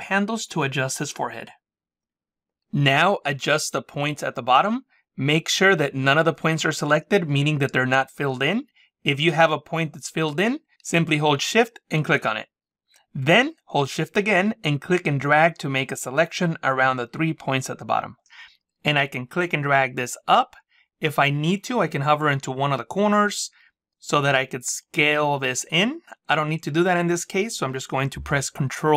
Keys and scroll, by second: 28.5 ctrl+z.